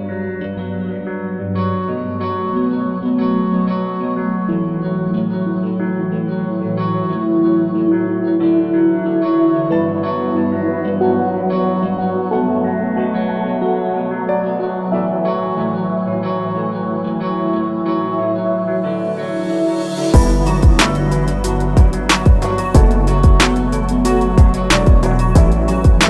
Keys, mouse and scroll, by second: 5.5 scroll up 1, 6.9 click, 13.0 alt+scroll down 1, 13.8 scroll down 1, 14.3 scroll up 1, 15.1 scroll down 1, 17.3 click, 20.3 click.